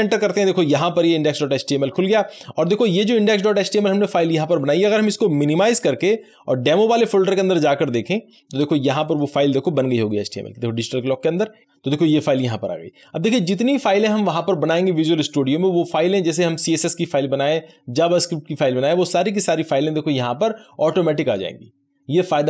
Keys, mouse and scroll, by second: 5.4 Return, 5.5 click.